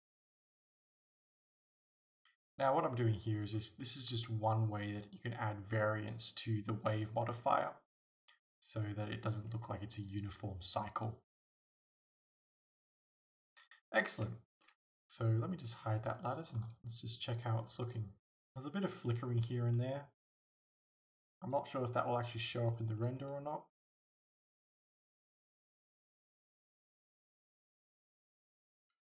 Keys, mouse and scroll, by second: 1.7 scroll down 2, 13.1 alt+a, 13.5-14.1 scroll up 2, 14.3-16.1 middle drag, 16.1 click, 16.2 middle click, 16.6 a, 17.6 scroll up 2, 20.6 right click, 28.8 click.